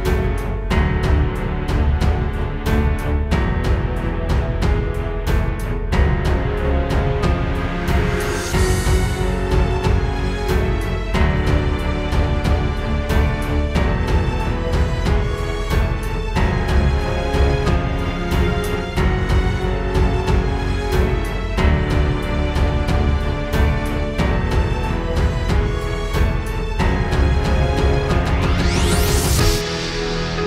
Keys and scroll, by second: 4.2 space, 4.6 space, 6.6 space, 7.3 super+space, 8.8 space, 9.2 space, 10.3 space, 11.1 alt+super+space, 11.2 alt+super+space, 11.7 super+space, 12.5 space.